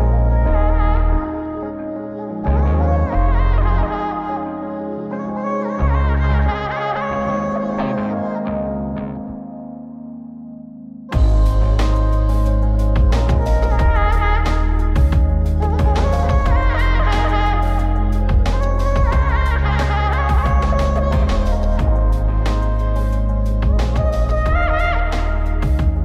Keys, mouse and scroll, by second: 2.4-2.8 scroll down 3, 2.8 middle click, 3.9 click, 5.0 ctrl+shift+click, 6.5 click, 9.7-12.2 drag, 12.5-14.0 drag, 14.7-16.0 drag, 17.3-19.0 drag, 22.2-23.3 drag.